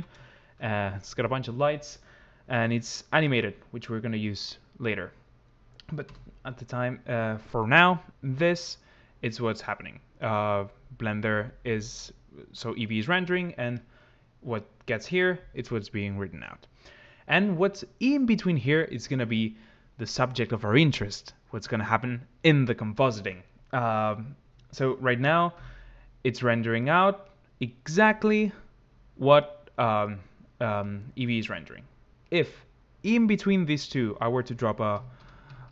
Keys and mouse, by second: 3.1 click, 5.8 KP_0.